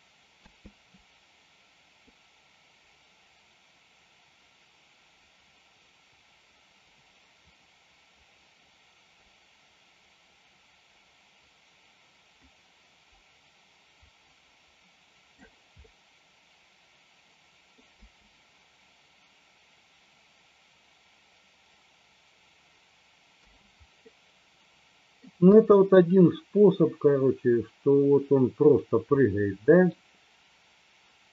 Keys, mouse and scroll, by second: 0.5 space, 2.1-15.5 drag, 16.0-17.8 middle drag, 18.0 space, 23.5 space, 24.2-25.3 middle drag, 25.6 space, 29.2-30.0 middle drag.